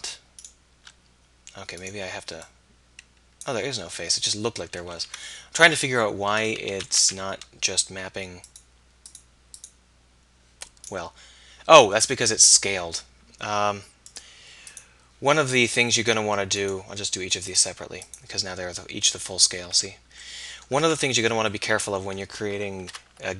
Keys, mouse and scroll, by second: 0.5 middle click, 2.4 middle click, 3.4 middle click, 5.0 ctrl+z, 6.7 a, 7.0 a, 15.8 middle click, 17.5 middle click, 19.5 a, 19.7 a, 20.8 Tab, 23.0 alt+h.